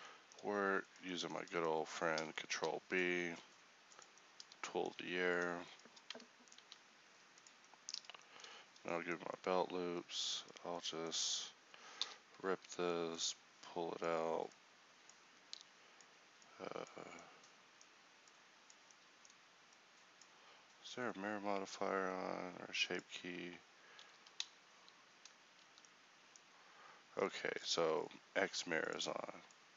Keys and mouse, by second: 2.6 ctrl+v, 3.4 ctrl+b, 4.8 middle click, 6.6 ctrl+b, 10.1-17.2 drag, 17.2-25.8 middle drag.